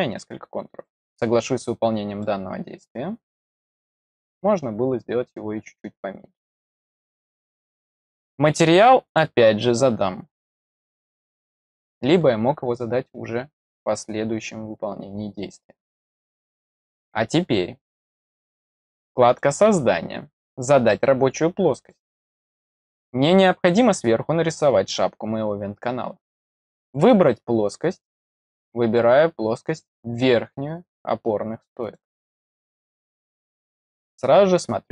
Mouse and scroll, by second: 0.9 click, 2.1-6.4 middle drag, 9.0 click, 11.0 click, 11.2 click, 19.2 click, 21.7 click, 26.8 click, 28.2 click, 31.7 click, 34.4 click.